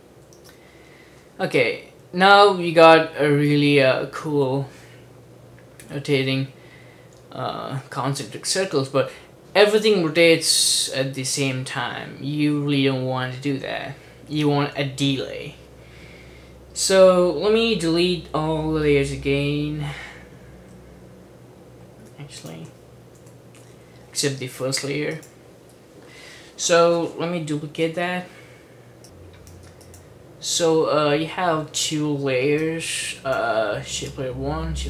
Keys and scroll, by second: 0.2 super+d, 23.3 BackSpace, 27.8 super+d.